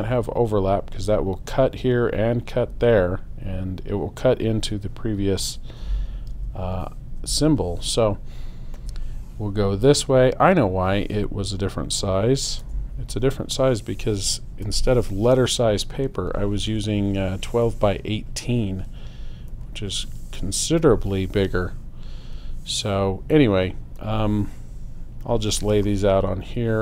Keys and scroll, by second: 6.3 super+0, 12.6 BackSpace.